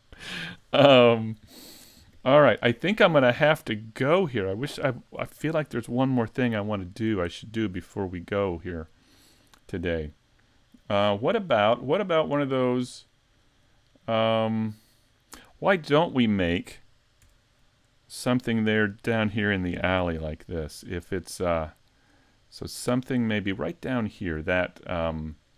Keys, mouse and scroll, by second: 7.3 shift+middle click, 8.0 middle click, 9.4 shift+middle click, 11.0-11.4 scroll down 3, 12.0-12.5 scroll up 3, 12.5 scroll down 1, 13.1 shift+middle click, 15.5 middle click, 16.3 shift+middle click, 17.5-18.0 scroll down 4, 17.6 `, 18.0 middle click, 19.1-19.5 scroll up 1, 19.5 shift+middle click, 19.9-20.4 scroll up 3, 20.4 shift+middle click, 20.9 middle click, 21.9-22.3 scroll up 2, 22.4 shift+middle click, 22.8 scroll up 1, 23.2 shift+middle click.